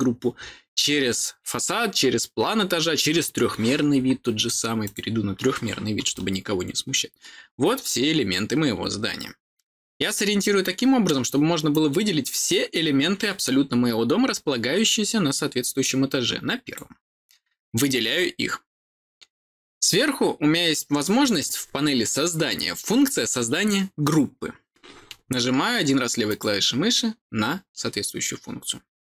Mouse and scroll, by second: 4.8 click, 6.1-11.0 middle drag, 11.6-16.7 drag, 26.2 click.